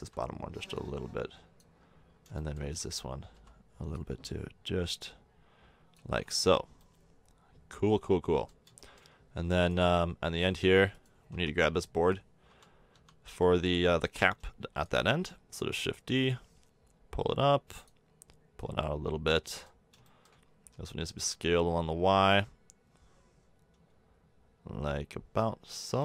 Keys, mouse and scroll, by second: 0.0 l, 0.7-1.8 drag, 2.4 middle click, 2.6 a, 3.3 l, 3.9-5.9 drag, 6.1 Tab, 11.3 Tab, 12.5 l, 12.9 l, 13.3 l, 13.5 l, 14.7 shift+d, 15.5 click, 18.6 middle click, 19.5 middle click, 19.8 click, 20.7-23.9 drag, 20.7 s.